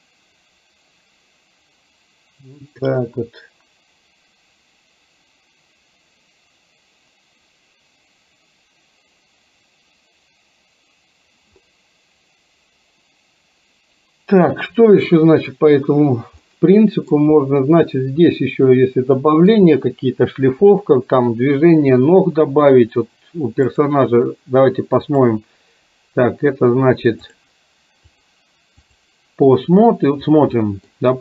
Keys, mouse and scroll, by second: 16.5-17.1 middle drag, 18.5-19.5 middle drag, 23.7 click, 25.2 click, 27.4 click, 28.1-29.2 drag, 30.6-31.0 middle drag.